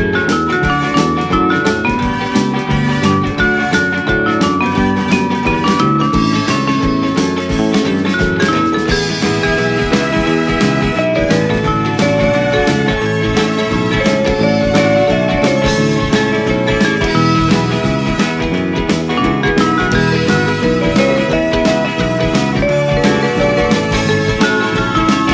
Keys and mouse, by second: 0.1 click, 1.5 e, 2.6 click, 2.9 Tab, 4.1 alt+z, 5.8 shift+middle click, 7.5 Tab, 9.3 click, 11.2 click, 12.6 click, 13.0 Tab, 14.2 g, 15.0 click, 15.3 right click, 16.6 click, 16.9 s, 18.0 click, 18.3 s, 18.7 z, 19.3 click, 19.6 g, 19.8 z, 20.6 click, 21.0 shift+middle click, 21.6 g, 22.0 y, 23.4 click, 24.6 s, 25.2 click.